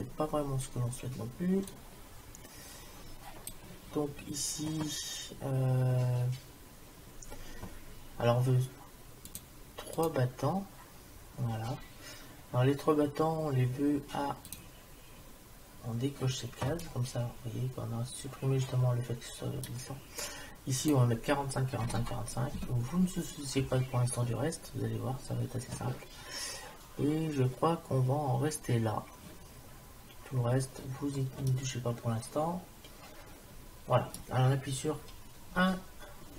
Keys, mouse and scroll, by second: 1.7-3.5 drag, 9.3-12.0 drag, 14.5-16.4 drag, 17.0-18.6 middle drag, 20.9-22.6 drag, 31.5-33.6 middle drag, 35.5 KP_1.